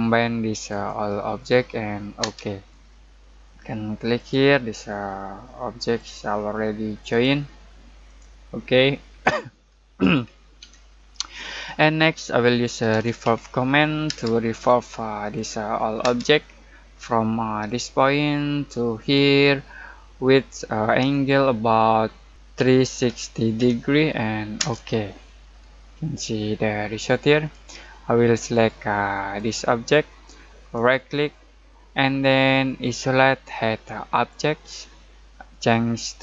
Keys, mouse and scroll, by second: 2.2 space, 2.8 middle click, 4.1 click, 8.6-8.9 scroll down 1, 8.9 middle click, 9.5-10.6 scroll up 1, 10.6 Escape, 12.5-14.0 typing, 14.5 click, 16.0 space, 16.4 middle click, 17.6 click, 22.3-24.0 typing, 24.5 Return, 25.5-25.8 scroll down 1, 25.8 middle click, 28.5 click, 30.7 right click, 32.8 click.